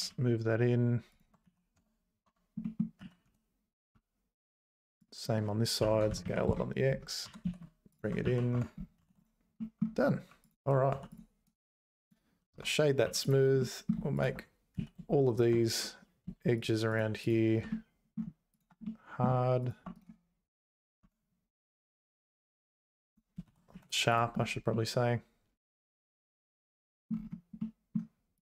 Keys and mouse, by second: 1.4 z, 1.8 Tab, 2.3 Tab, 2.6 middle click, 3.0 z, 3.2 1, 3.9 `, 5.1 click, 5.8 s, 7.2 g, 8.2 z, 8.5 Tab, 9.1 ctrl+s, 9.5 middle click, 10.9 h, 11.1 click, 11.5-12.5 right drag, 12.5 Tab, 13.0 3, 13.2 click, 13.6 middle click, 14.7 z, 15.7 2, 16.6 shift+click, 16.9 shift+click, 17.7 middle click, 18.8 middle click, 20.0-21.0 right drag, 21.0 Tab, 22.3 click, 22.7 click, 23.4 ctrl+s, 23.7 z, 24.7-27.1 middle drag, 27.6 middle click.